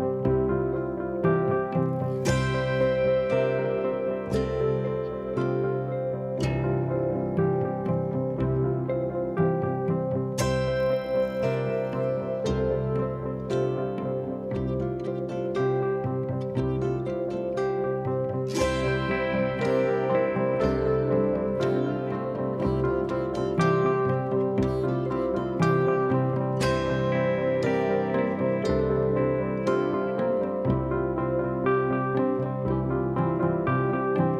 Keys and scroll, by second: 3.1 F1, 4.1 ctrl+z, 4.6 ctrl+d, 6.8 F1, 6.9 F2, 12.5 F1, 15.4 F1, 15.6 F2, 17.0 ctrl+d, 20.6 F1, 21.2 F1, 21.4 F2, 21.6 F1, 24.2 ctrl+z, 26.5 F1, 27.0 ctrl+d, 27.1 Escape.